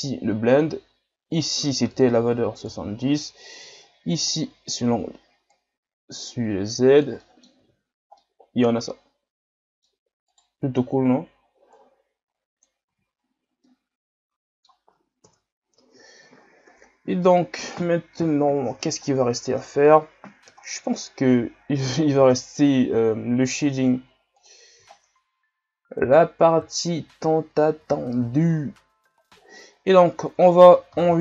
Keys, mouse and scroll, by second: 0.0-7.2 drag, 7.2 middle click, 7.6 a, 7.9 scroll down 2, 8.2-10.3 middle drag, 10.3-11.7 right drag, 11.7-12.9 drag, 12.9 a, 13.2-13.6 scroll down 4, 13.7-15.2 middle drag, 15.2 KP_1, 16.3 scroll down 6, 17.3 scroll up 3, 18.4 shift+scroll up 2, 18.6-19.0 shift+scroll down 6, 19.6-20.6 shift+scroll up 1, 20.6 shift+scroll down 4, 21.0 scroll up 4, 22.2 n, 24.3-24.8 drag, 24.8 shift+scroll up 6, 26.7-27.3 shift+scroll up 8, 29.1-31.1 scroll down 6, 31.1 ctrl+s.